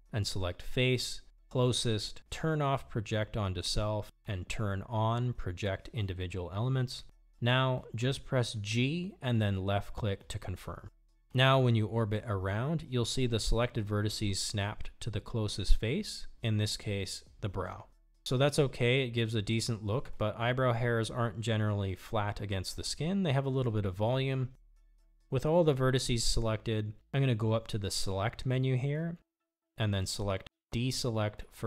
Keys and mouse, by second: 9.4 g, 13.0-16.6 middle drag, 16.9 Tab, 17.4-21.3 middle drag, 21.9 KP_1, 28.4 Tab.